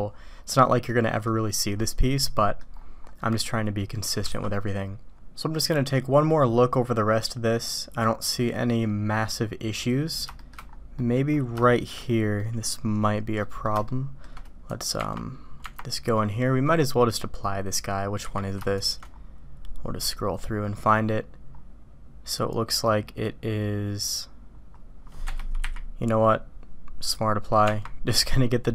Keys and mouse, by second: 0.9-1.3 drag, 1.7-2.6 drag, 3.5-3.9 middle drag, 5.5-10.1 middle drag, 10.4 shift+drag, 11.0 middle click, 11.6-11.9 shift+drag, 12.4 middle click, 13.4 middle click, 13.8-14.3 shift+middle drag, 14.7 click, 18.1 q, 27.6 Tab.